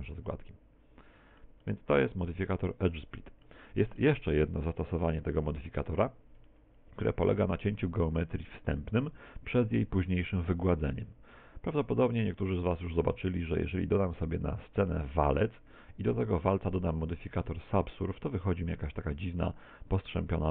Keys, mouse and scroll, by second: 1.7 middle click, 3.0 middle click, 3.7 middle click, 4.3 middle click, 5.5 middle click, 6.5-7.1 shift+middle click, 10.7 x, 11.7 middle click, 13.1 shift+a, 15.6 middle click, 17.2 ctrl+1, 18.5 middle click, 20.0 scroll up 5.